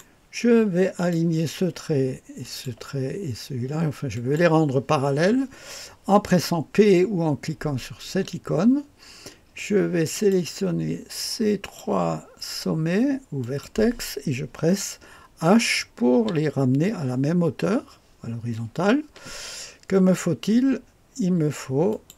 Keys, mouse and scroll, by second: 1.0 click, 2.4 click, 4.2 click, 8.1 p, 10.1 click, 11.6 click, 13.4 click, 21.9 click.